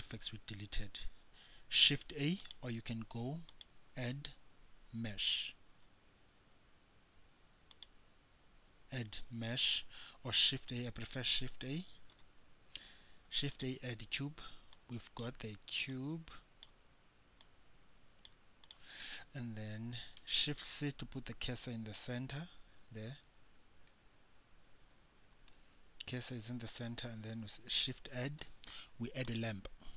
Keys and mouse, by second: 0.4 shift+a, 2.6 click, 3.6 click, 3.8 click, 4.0-6.1 drag, 10.8 shift+a, 15.0-16.1 drag, 20.4 shift+c, 24.1 shift+c, 24.8 click, 27.8 shift+a.